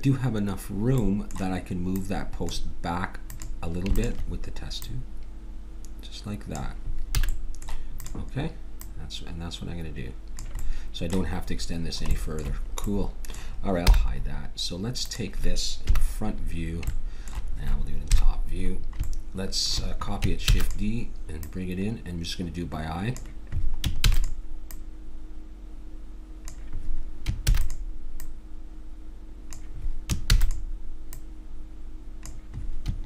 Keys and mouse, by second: 1.9-6.5 drag, 7.3 a, 8.1-10.8 drag, 13.9 h, 15.0-16.7 drag, 15.8 KP_1, 18.2 KP_7, 20.4 shift+d, 21.3-23.3 drag, 24.1 shift+d, 24.7-26.7 drag, 27.4 shift+d, 28.2-29.9 drag, 30.3 shift+d, 31.1-33.0 drag.